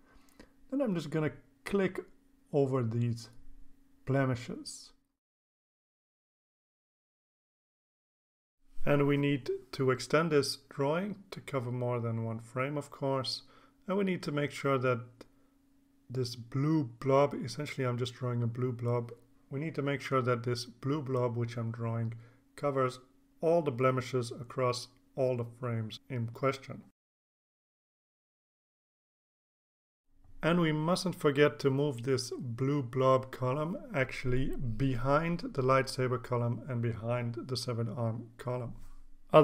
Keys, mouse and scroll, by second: 0.9 click, 3.7 click, 4.5 click, 5.2 click, 8.3-9.4 drag, 9.6-9.9 scroll down 2, 10.6-11.9 drag, 12.2 click, 14.0 click, 17.2-22.8 drag, 23.8 click, 24.8 click, 25.5-27.0 drag, 27.5-28.3 drag, 28.9 click, 29.4 click, 29.9 click, 32.2-35.5 drag, 36.6-38.4 drag.